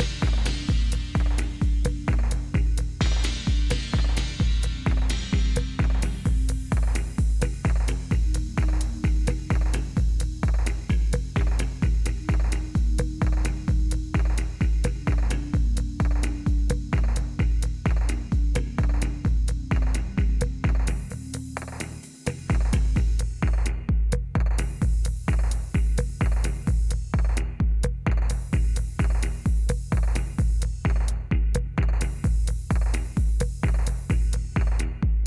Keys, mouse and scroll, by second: 0.0-1.3 typing, 3.1-8.6 typing, 10.0 Return, 13.9-14.8 typing, 18.8-19.9 typing, 21.8 Return, 23.9 click, 25.2 click, 26.4 click, 27.3 click, 30.6-34.2 drag.